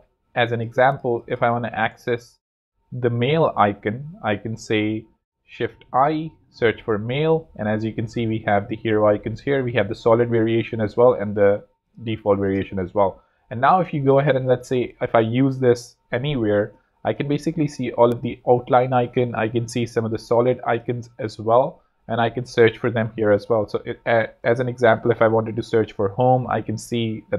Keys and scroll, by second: 1.8 shift+Return, 5.2-6.8 typing, 12.1 space, 13.8 alt+z, 14.5 space, 14.9 z, 23.8 Escape, 24.6-25.8 typing.